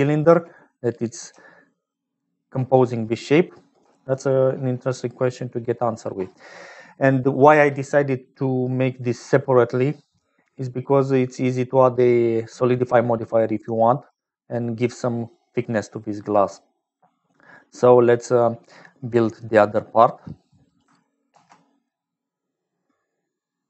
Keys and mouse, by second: 1.7-23.6 typing, 1.8-3.0 drag, 3.0 middle click, 10.0 click, 11.9 click, 14.0 click, 14.5 middle click, 14.9 click, 20.6 click, 21.3 ctrl+s.